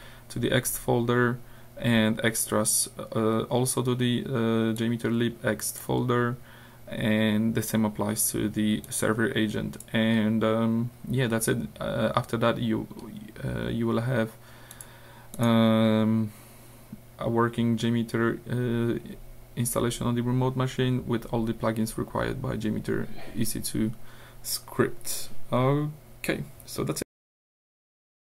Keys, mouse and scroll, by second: 1.2 scroll down 2, 4.8 click, 6.1-6.5 scroll down 2, 8.9 click, 10.2-10.7 scroll down 2, 13.0-13.8 scroll up 2, 14.7 click, 15.3 click.